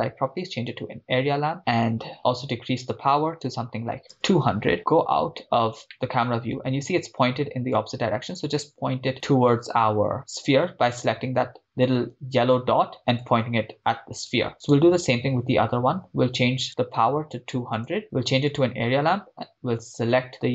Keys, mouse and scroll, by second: 0.6-1.2 drag, 2.8-4.7 drag, 4.0 0, 4.8 KP_0, 5.5 scroll down 2, 5.9-6.4 middle drag, 7.8 click, 11.4-11.8 scroll up 4, 12.0 scroll down 2, 13.2 click, 14.7 click, 14.7 right click, 16.7-17.8 drag, 17.5 0, 18.6 click, 20.3 click.